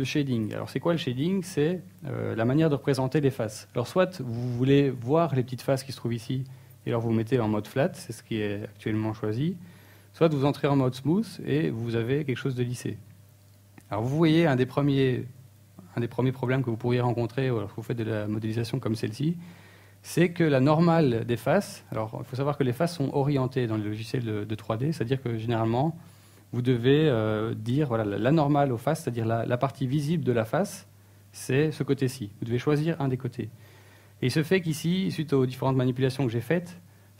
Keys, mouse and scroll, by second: 2.3 middle click, 3.7 scroll down 1, 4.2 scroll up 2, 15.6 click, 19.0 middle click, 20.0 middle click, 21.1 middle click, 21.5 shift+middle click, 21.9 middle click, 25.1 middle click.